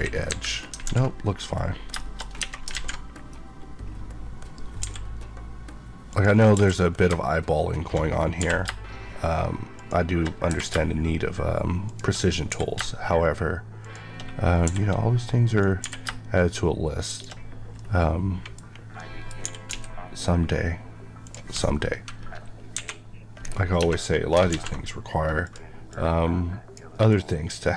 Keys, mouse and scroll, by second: 0.6 KP_3, 0.8 alt+z, 1.1 scroll up 1, 1.9 shift+middle click, 2.2 scroll up 1, 2.3 Tab, 2.6 alt+z, 3.1-4.7 scroll down 1, 4.7 g, 6.0 click, 6.5 e, 8.3 r, 9.7 shift+click, 10.2 click, 10.4 r, 11.7 click, 12.6 shift+g, 13.7 shift+click, 14.5 r, 15.4 right click, 15.7 r, 17.0 shift+click, 17.7 middle click, 18.5-18.9 scroll up 1, 18.9 middle click, 19.4 typing, 21.2 click, 22.6 KP_1, 23.3 scroll, 23.4-23.7 scroll down 1, 23.7 Tab, 24.4 alt+z, 25.4 alt+click.